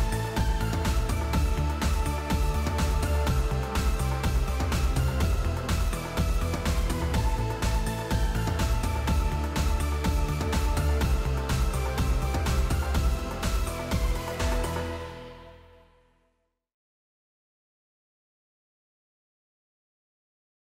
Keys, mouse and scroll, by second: 0.2 click, 0.3 click, 1.5 click, 1.7-2.4 typing, 2.9 click, 4.8 click, 5.2 right click, 6.6 click, 8.2 click, 8.7-9.9 typing, 11.0 click, 11.2 click, 12.0 click, 12.2 click, 14.0 click, 14.4-15.3 typing, 15.5 Tab, 17.4-17.8 typing, 18.2 Tab, 19.0-19.6 typing.